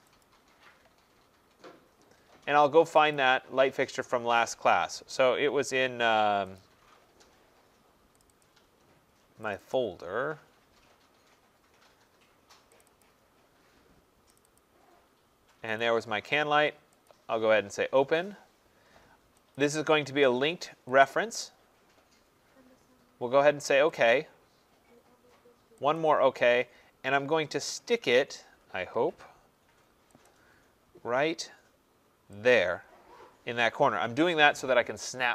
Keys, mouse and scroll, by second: 0.2 click, 3.1 click, 6.6 click, 8.4 click, 9.6 click, 9.8 click, 10.2 middle click, 12.8 click, 13.0 click, 14.4 click, 14.6 click, 15.8 click, 17.1 click, 21.0 click, 24.1 click, 26.0 click, 32.5 click.